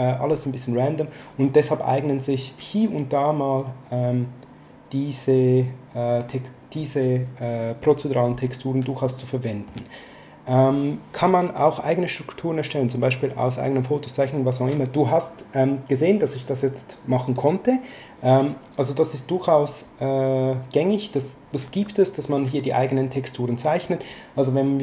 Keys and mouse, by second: 9.0 shift+middle click, 17.3 click, 19.4 click, 20.8 click.